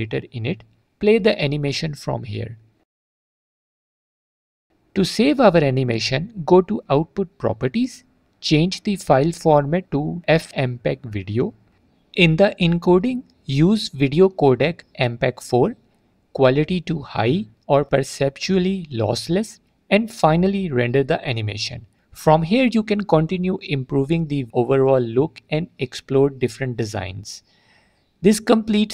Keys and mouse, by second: 1.3 click, 6.2 click, 6.6 click, 8.1-9.6 drag, 11.3 click, 13.2 click, 14.5-15.3 drag, 16.4 click, 18.1-21.4 drag, 23.1 click, 26.4-28.1 drag.